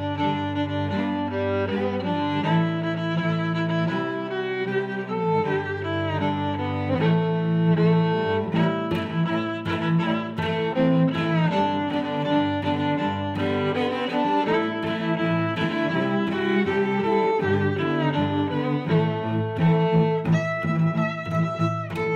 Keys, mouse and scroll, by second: 0.0 y, 0.7 click, 1.3 s, 2.8 click, 3.2 d, 3.5 click, 3.9 s, 4.6 s, 5.3 x, 6.7 click, 7.2 s, 7.8 click, 8.0 middle click, 8.8 click, 9.5 click, 11.3 Tab, 11.9 Tab, 12.4 right click, 12.7 click, 13.3 click, 13.7 5, 13.8 0, 14.0 Return, 14.8 Tab, 15.9 click, 16.7 click, 17.1 middle click, 18.3 click, 18.6 click, 18.9 4, 19.3 click, 19.6 5, 20.0 middle click, 20.5 click, 21.2 middle click.